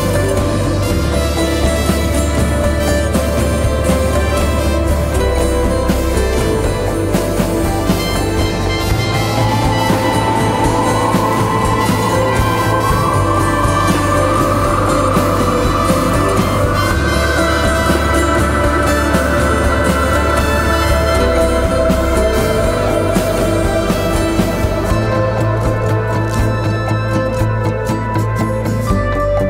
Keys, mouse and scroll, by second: 9.6 ctrl+t, 10.5 alt+shift+click, 15.8 alt+shift+click, 21.1 alt+shift+click, 23.3 Up, 23.6 Up, 24.1 Return, 24.7 Right.